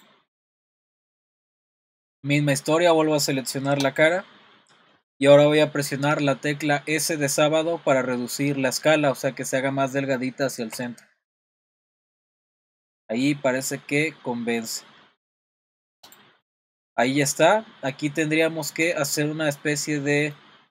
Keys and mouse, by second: 0.4 middle click, 1.5 click, 1.9 middle click, 3.9 click, 10.7 s, 16.4 middle click, 19.9 middle click.